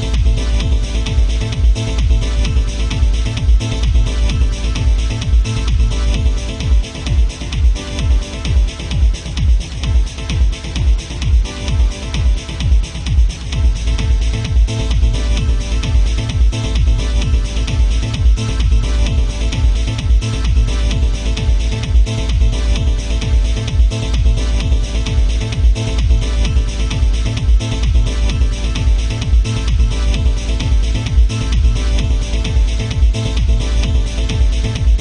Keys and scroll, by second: 16.7 alt+space, 21.1 ctrl+z.